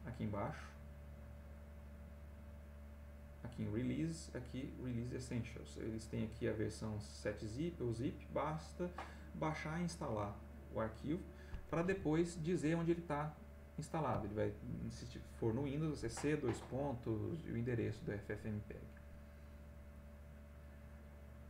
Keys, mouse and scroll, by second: 12.1 alt+Tab, 20.7 click.